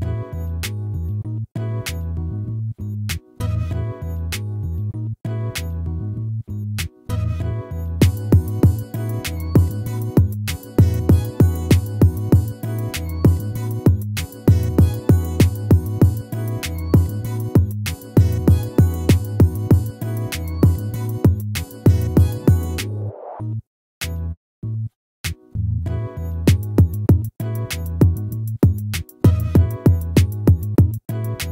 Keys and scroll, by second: 4.3 ctrl++.